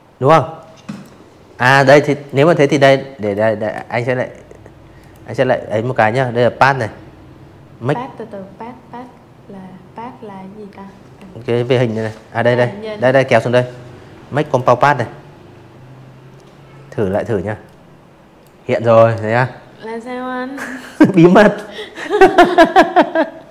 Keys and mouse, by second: 1.9 click, 11.3 click, 13.9 click, 14.5 click, 22.6 v.